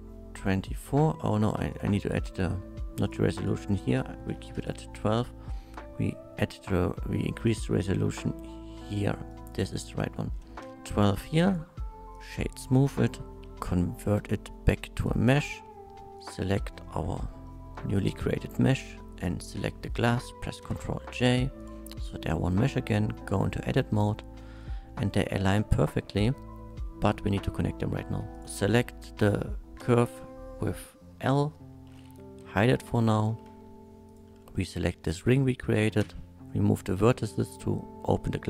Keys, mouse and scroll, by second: 1.7 click, 3.0 click, 3.3 click, 4.4 KP_1, 4.4 KP_2, 4.6 Return, 7.5-9.5 drag, 9.3 right click, 9.7 click, 10.7 KP_2, 10.7 Return, 10.8-11.3 middle drag, 11.5 click, 12.1 click, 12.6-13.2 middle drag, 15.0 click, 16.2 shift+click, 16.7-17.7 shift+middle drag, 18.7 click, 20.6 ctrl+j, 21.6 click, 22.2 Tab, 23.2-24.3 middle drag, 24.9 shift+middle click, 25.5 scroll up 1, 25.8 scroll down 1, 28.3 click, 29.8 l, 32.4 h, 32.7 middle click, 33.3 2, 34.1 click, 34.4 shift+middle click, 36.0 x, 37.3 middle click.